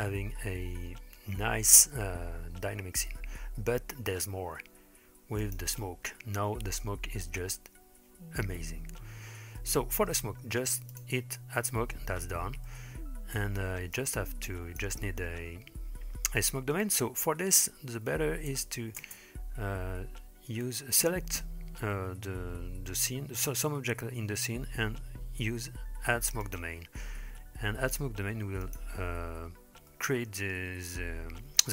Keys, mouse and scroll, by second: 1.5-2.2 scroll up 2, 2.2-2.8 scroll down 2, 5.4 click, 9.6 middle click, 10.9 click, 12.7-13.6 middle drag, 14.0-14.9 drag, 18.6 space, 19.1 space, 26.5 click, 28.7 click, 29.9-30.5 middle drag.